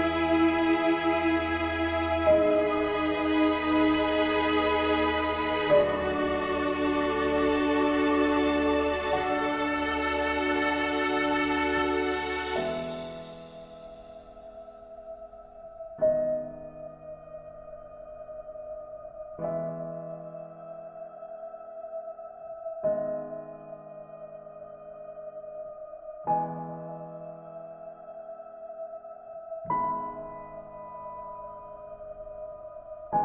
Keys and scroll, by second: 2.0 ctrl+d.